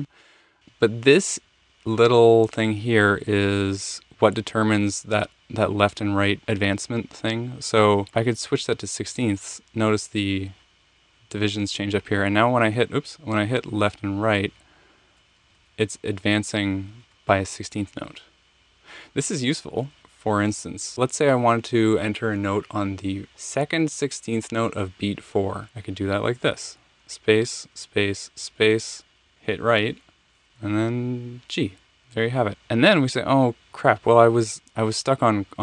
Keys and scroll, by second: 12.2 Down, 13.1 Up, 13.5 Right, 14.0 typing, 15.4 Left, 15.5-16.0 typing, 18.0 typing, 27.0 space, 27.7 space, 29.3 Right, 30.9 g.